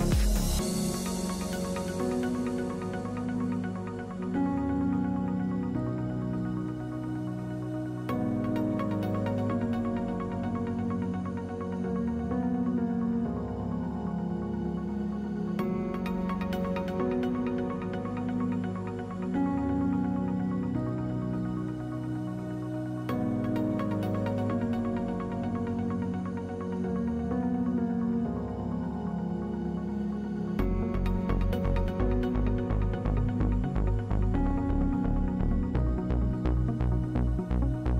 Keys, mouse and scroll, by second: 1.1 shift+v, 1.5 a, 4.4 shift+v, 5.9 shift+v, 6.3 a, 7.4 ctrl+r, 9.3 ctrl+Tab, 11.1 alt+x, 11.6 a, 13.4 alt+x, 14.1 ctrl+Tab, 15.9 shift+v, 16.5 a, 17.1 shift+v, 17.5 a, 19.3 shift+v, 19.7 a, 20.4 shift+v, 20.8 a, 24.5 q, 24.7 w, 25.5 click, 26.2 ctrl+z, 31.5 a.